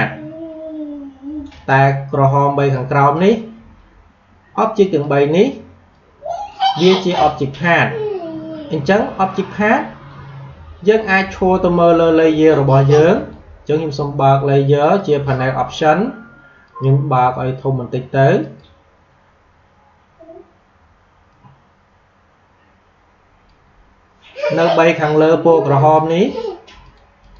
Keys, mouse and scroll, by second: 6.2-8.8 drag, 13.1 click, 21.2-27.3 drag.